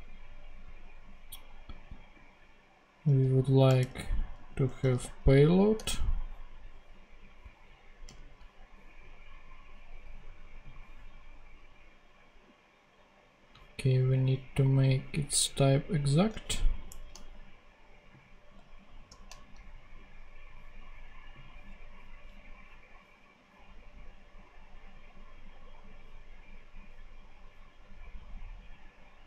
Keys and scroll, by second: 4.3-5.3 typing, 5.6 Return, 16.8 shift+\, 19.0 shift+\.